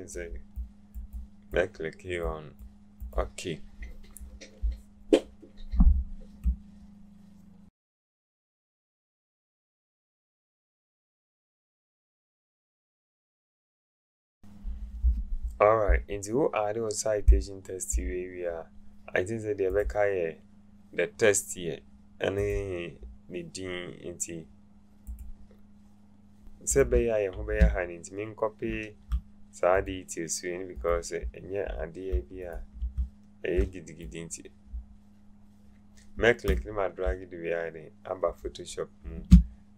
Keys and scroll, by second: 10.8 ctrl+z, 13.5 ctrl+9, 13.9 0.